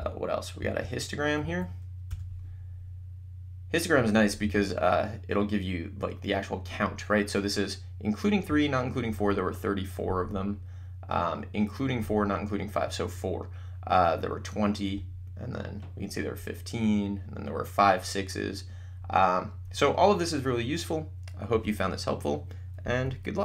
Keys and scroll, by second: 0.2 1, 0.8 Down, 1.6 Up, 2.0 Return.